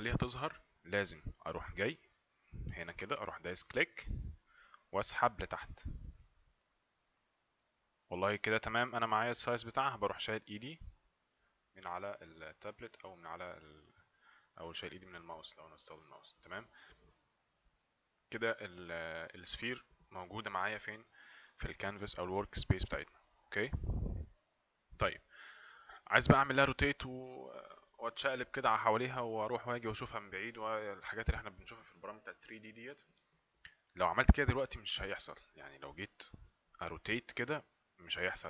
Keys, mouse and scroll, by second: 4.0 click.